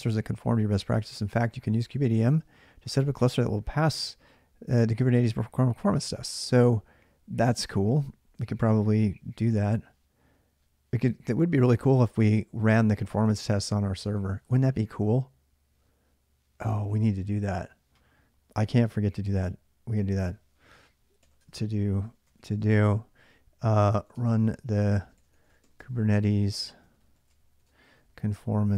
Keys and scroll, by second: 18.6 alt+Tab, 20.0 ctrl+[, 20.0-28.7 typing.